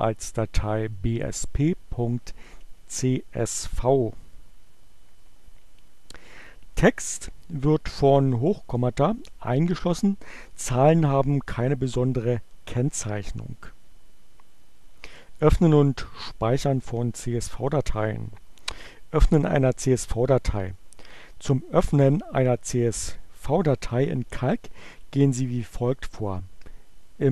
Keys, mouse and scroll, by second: 27.2 click.